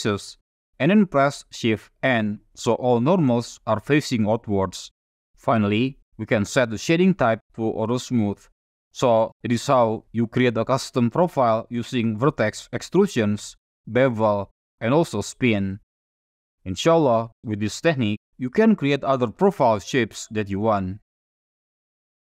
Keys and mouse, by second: 0.1 a, 2.2 shift+n, 3.6 Tab, 5.0 F6, 6.5-8.0 right drag, 9.0 click, 10.1-10.9 drag, 10.9-11.5 middle drag, 13.1 shift+middle drag, 14.0 middle drag, 14.5-14.9 shift+middle drag.